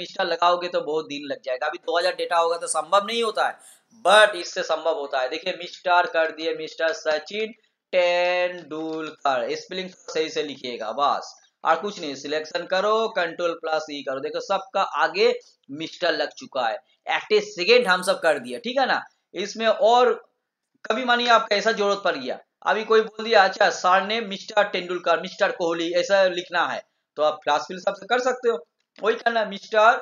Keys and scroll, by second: 13.5 ctrl+e.